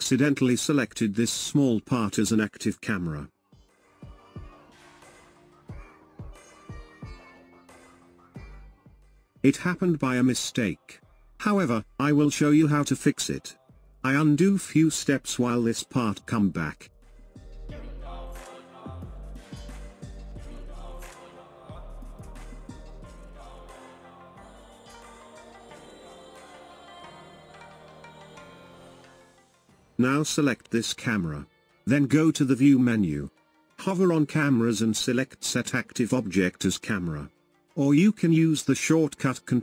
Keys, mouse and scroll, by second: 1.4-4.4 drag, 5.1-6.8 middle drag, 6.8 scroll up 1, 7.3-13.6 shift+middle drag, 16.0 ctrl+z, 16.9 ctrl+z, 18.2-19.2 middle drag, 19.2 scroll down 3, 19.9 shift+middle click, 20.7-21.0 scroll down 2, 23.7-26.5 middle drag, 26.5 scroll down 2, 27.2-29.9 middle drag, 29.9-39.6 drag.